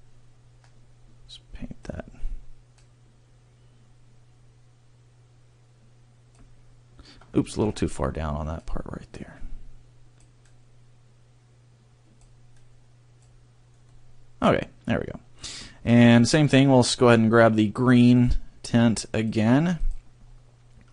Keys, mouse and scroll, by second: 2.7 click, 8.6 click, 13.9 middle click, 16.0 scroll, 18.1 click, 20.2-20.9 scroll.